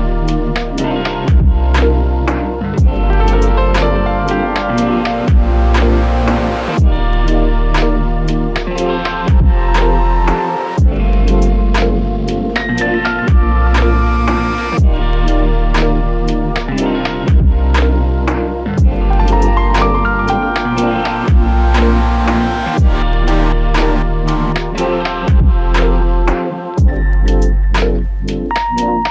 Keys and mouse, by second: 5.1 shift+click, 6.6 shift+click, 6.7 alt+click, 8.8-9.6 typing, 12.7 double click, 19.7 alt+click, 21.4 double click, 25.2 alt+click, 26.7 double click.